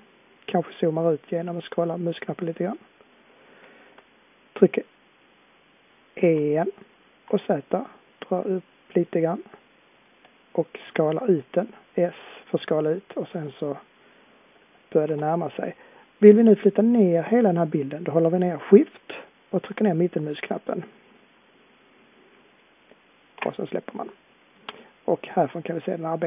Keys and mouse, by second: 1.5-6.2 middle drag, 6.2 e, 10.8 s, 14.5-18.8 middle drag, 20.5-24.2 middle drag.